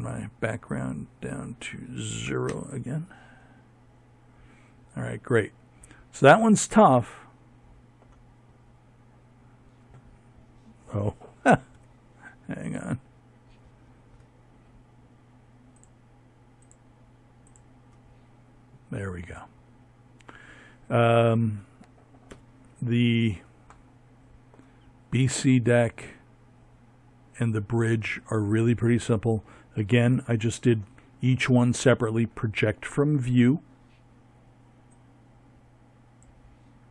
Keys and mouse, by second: 6.5-8.8 middle drag, 9.6 Tab, 13.5-15.2 drag, 15.4 click, 15.7-17.0 drag, 20.0 KP_7, 32.6-34.7 drag.